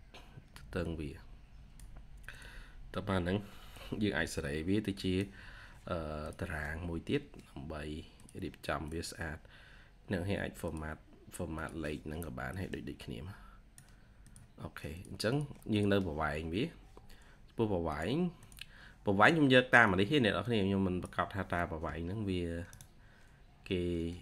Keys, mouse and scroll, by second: 11.6 typing, 15.2 double click, 22.6 right click.